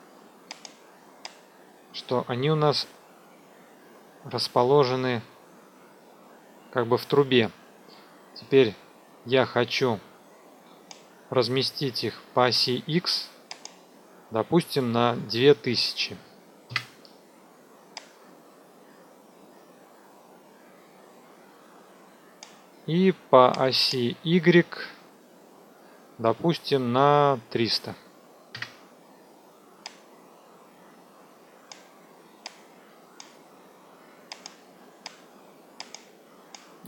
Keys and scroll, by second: 15.4 KP_2, 15.5 KP_0, 16.6 KP_Enter, 27.4 KP_3, 27.6 KP_0, 28.5 KP_Enter.